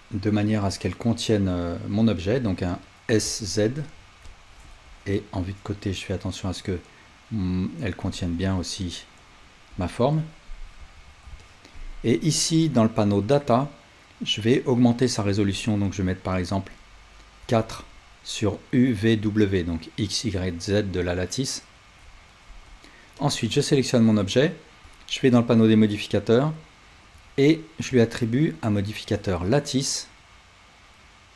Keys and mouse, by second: 0.8-4.4 drag, 3.1 s, 5.5-13.3 drag, 10.8 alt+z, 14.5-23.3 drag, 22.0-23.3 middle drag, 24.9 click, 27.2-31.3 drag.